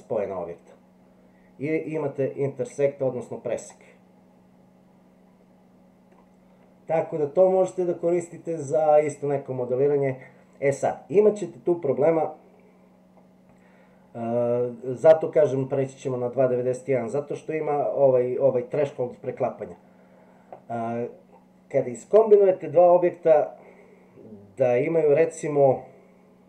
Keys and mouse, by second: 3.7-6.2 middle drag.